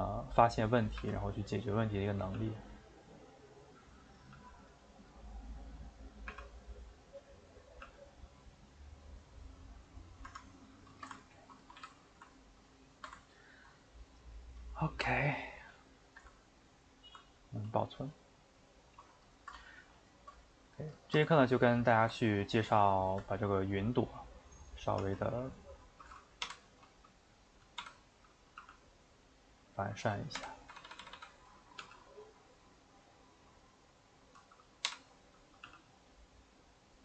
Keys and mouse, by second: 1.0 r, 2.3 g, 4.3 g, 5.0-6.3 middle drag, 6.3 r, 7.8 g, 9.9-10.4 middle drag, 10.4 Tab, 10.7-11.6 shift+middle drag, 11.6 a, 11.8 a, 12.0-24.7 ctrl+middle drag, 24.7 click, 25.2 Tab, 25.7 click, 26.4 l, 27.8 l, 28.6 g, 30.4-31.8 typing, 34.6 click, 34.9 l, 35.7 g.